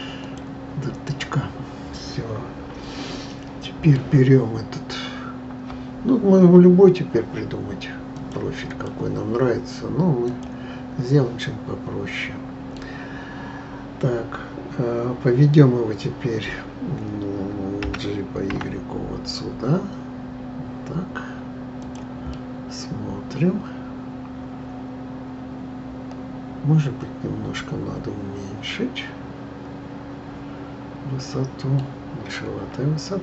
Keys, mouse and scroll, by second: 1.0-4.1 middle drag, 8.1-10.4 drag, 11.4-14.4 middle drag, 17.8 g, 22.3-25.4 middle drag.